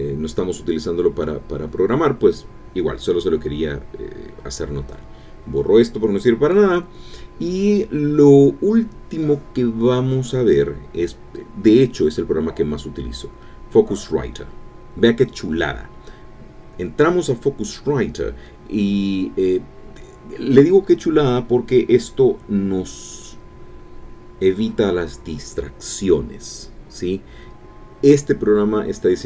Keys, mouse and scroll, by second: 0.1 click, 2.8 click, 4.0 click, 5.5 shift+Delete, 7.9 click, 8.5 click, 11.8 alt+F2, 12.2-13.4 typing, 14.4 End, 28.5 Return.